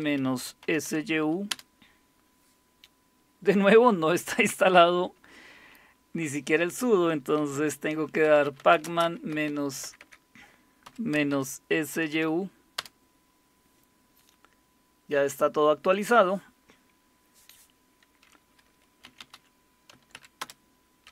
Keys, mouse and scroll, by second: 0.0-1.3 typing, 1.5 Return, 7.5-12.8 typing, 18.8-21.1 typing.